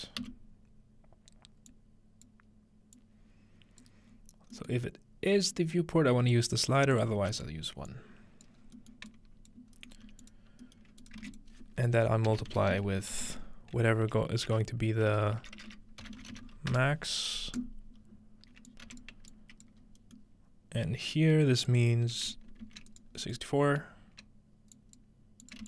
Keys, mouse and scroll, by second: 0.2 f, 1.7-4.8 drag, 4.1-5.5 scroll up 2, 4.8-8.8 middle drag, 5.5 scroll up 1, 5.5 click, 7.0 click, 7.2 1, 8.6 scroll down 2, 8.8-10.6 drag, 10.1-16.3 typing, 11.0-13.2 shift+drag, 17.6 click, 18.0 scroll up 2, 18.7 click, 18.9 m, 19.1-21.5 scroll up 1, 19.3 click, 21.5 scroll up 1, 21.7 click, 22.6 ctrl+c, 23.2-23.5 scroll up 2, 23.5-24.9 middle drag, 24.8-25.6 ctrl+drag.